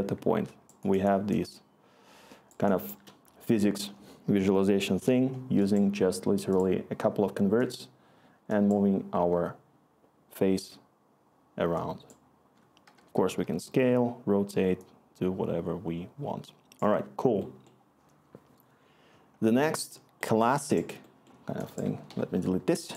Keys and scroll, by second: 0.0-1.4 scroll, 9.1 Return, 13.2-13.7 typing, 22.0 Delete.